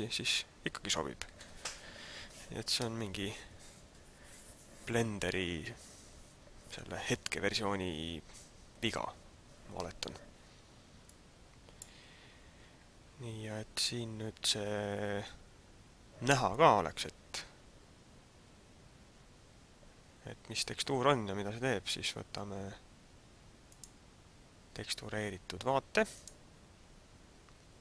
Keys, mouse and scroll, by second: 11.1 click, 23.8 click.